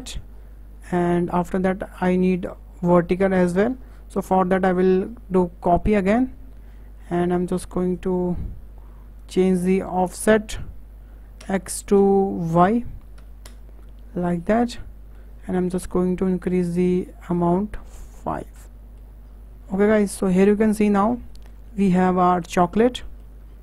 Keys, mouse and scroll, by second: 5.6-8.0 drag, 9.2-12.4 drag, 14.4-16.6 middle drag, 16.6 click, 17.8-18.2 scroll down 2, 18.2-19.2 middle drag, 19.2-20.1 scroll up 10, 20.1 shift+middle drag, 20.3 shift+scroll up 1, 20.4-21.6 middle drag, 21.6 scroll down 1, 21.7 middle click, 22.6 scroll down 3, 22.8-23.5 middle drag, 23.5-23.6 scroll down 7.